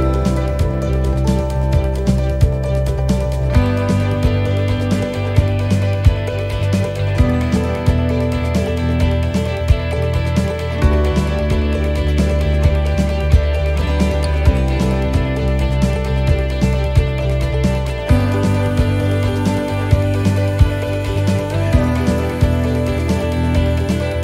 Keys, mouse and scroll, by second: 0.1 middle click, 0.1 scroll down 1, 1.5 click, 4.0 click, 5.9 middle click, 7.0 click, 13.4 click, 17.0 click, 19.2 middle click, 19.6-20.7 scroll down 4, 20.0 middle click, 21.0 shift+middle click, 22.1 right click, 23.0-24.2 typing.